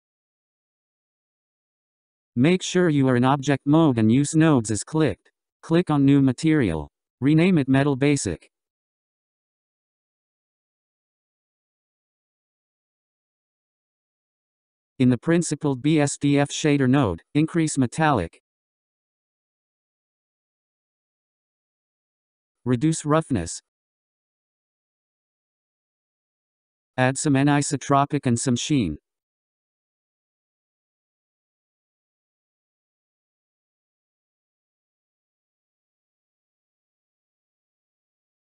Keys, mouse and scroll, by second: 0.0-1.2 drag, 7.3-11.7 drag, 15.2 scroll, 18.3-25.5 drag, 25.5 scroll, 27.3-28.2 middle drag, 28.2-31.0 drag, 31.0 scroll, 35.1-36.4 drag, 36.4 scroll.